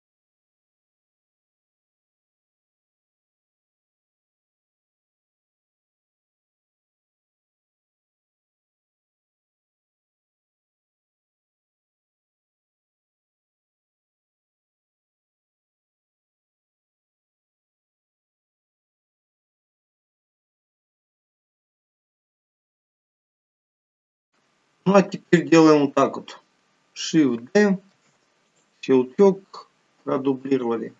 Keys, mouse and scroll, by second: 0.3 KP_7, 0.8 click, 1.3 click, 1.7 click, 2.6 KP_1, 3.0-3.6 scroll up 3, 3.7 s, 4.1 click, 5.2 click, 7.2 click, 7.7 click, 7.8 click, 8.1 click, 9.2 s, 10.4 click, 10.6 click, 11.0 KP_7, 11.4 click, 12.0 KP_1, 13.0 scroll down 2, 13.2 middle click, 13.5 click, 14.4 click, 16.2 click, 16.5 click, 17.3 s, 18.2 KP_7, 18.5 g, 19.2 middle click, 19.8 s, 20.4 click, 21.4 KP_1, 21.8 KP_7, 22.8 s, 23.1 middle click, 23.8 KP_7, 28.5 shift+d, 29.6 click.